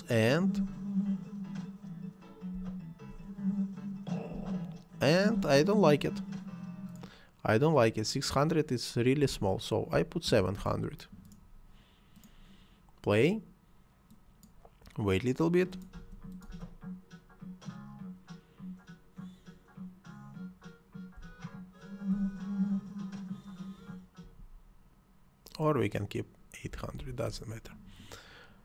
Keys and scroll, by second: 2.5 space, 4.3 space, 9.2 7, 9.5 0, 10.5 Return, 15.9 space, 21.1 space, 24.2 Escape, 26.6 8, 26.9 0, 27.2 Return.